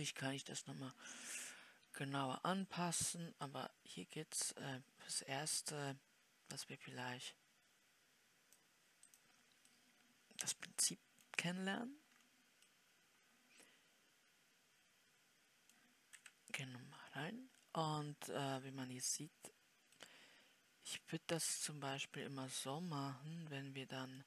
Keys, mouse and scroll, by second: 10.7-12.0 middle drag, 12.0-13.0 scroll down 3, 13.0-18.0 middle drag, 18.0-20.5 scroll up 4, 20.5-24.2 middle drag.